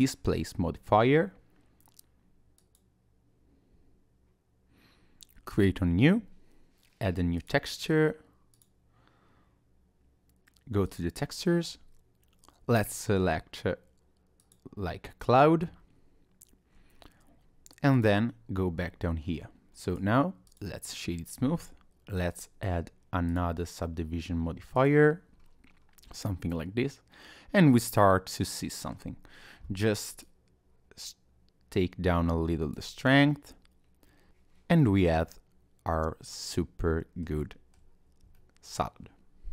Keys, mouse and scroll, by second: 5.5 click, 7.5 click, 10.9 click, 13.0 click, 17.9 click, 19.8 right click, 22.3 click, 24.8 click, 25.4-25.8 scroll up 1, 25.8-26.1 scroll down 1, 26.1 middle click, 29.2-30.1 scroll up 1, 30.2 shift+click, 33.1 middle click, 34.8 middle click, 37.4 shift+middle click, 38.3 middle click.